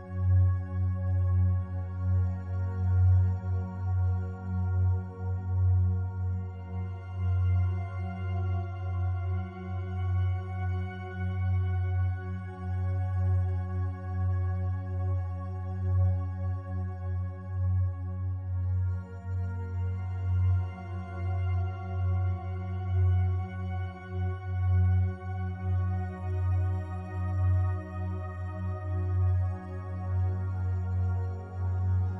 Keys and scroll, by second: 8.8 ctrl+t.